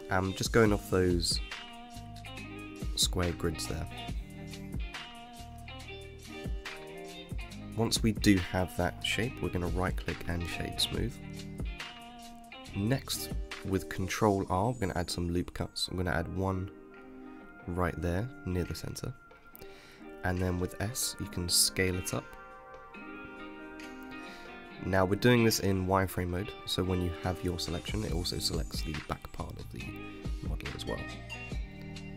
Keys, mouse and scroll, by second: 0.3 shift+middle click, 0.8 g, 1.4 middle click, 1.6 Tab, 1.7 scroll down 6, 1.8 middle click, 2.4 KP_1, 2.9 Tab, 3.3 g, 4.0 click, 4.1 click, 4.5 g, 5.7-7.6 middle drag, 7.6 click, 7.9-11.2 right drag, 11.2 click, 13.0 ctrl+r, 17.3 click, 19.7 s, 27.8 ctrl+r, 30.5 ctrl+r.